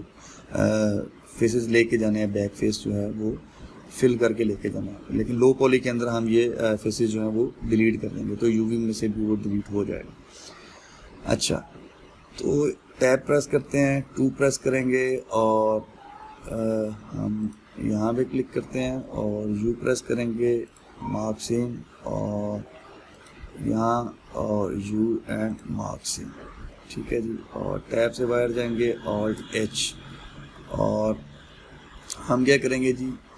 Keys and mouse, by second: 9.5-12.5 middle drag, 13.6 Tab, 14.7-18.1 middle drag, 18.1 alt+click, 18.6-21.4 middle drag, 21.4 u, 22.3-23.9 middle drag, 23.9 alt+click, 24.4-26.2 middle drag, 26.2 u, 27.7 middle click, 28.4 Tab, 29.9 alt+h, 30.9-33.3 ctrl+middle drag.